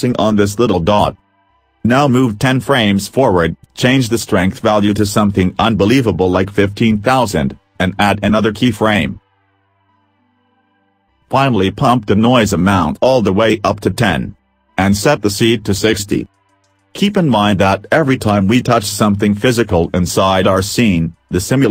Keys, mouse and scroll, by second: 1.4 click, 2.0 right click, 5.0 click, 7.3 0, 8.4 click, 16.5 click, 17.6 click, 20.5 middle click.